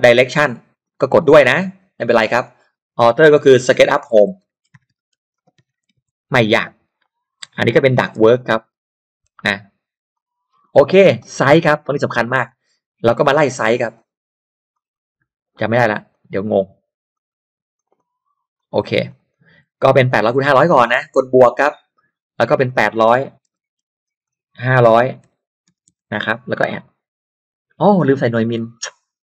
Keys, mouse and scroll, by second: 0.8 click, 2.4 click, 3.4-6.6 typing, 7.0 click, 8.0-9.4 typing, 10.1 click, 11.5 click, 12.4 click, 13.0 click, 14.7 click, 15.7 click, 16.1 click, 16.3 click, 17.1 click, 17.7 click, 18.5 click, 19.1 click, 21.6 click, 22.7 click, 23.1-26.4 typing, 24.2 click, 26.8 click.